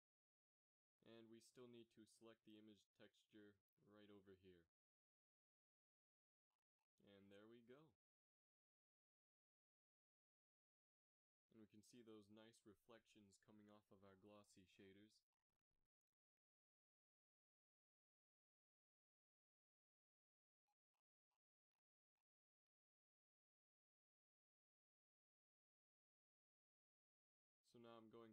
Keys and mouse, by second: 3.0 shift+z, 9.5 Tab, 21.5-24.0 drag.